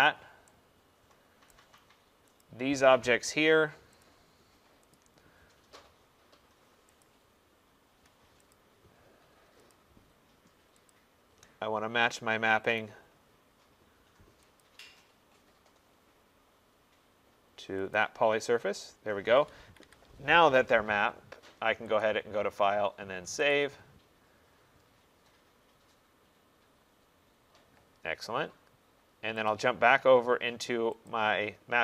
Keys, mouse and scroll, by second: 1.6 right click, 2.5 click, 4.1 shift+click, 4.4 shift+click, 5.0 click, 7.1 click, 8.6 click, 9.8 shift+click, 10.9 shift+click, 12.9 click, 13.5 middle click, 13.6 middle click, 14.7 click, 18.0 click, 18.9 middle click, 19.0 middle click, 19.1 middle click, 19.6 Escape, 19.9 Escape, 22.1 click, 23.6 click, 29.5 click, 31.2 click.